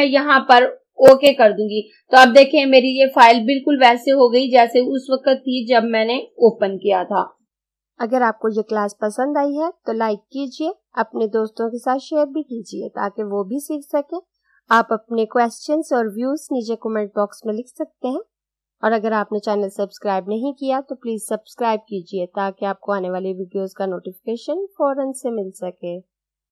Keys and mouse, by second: 1.1 click.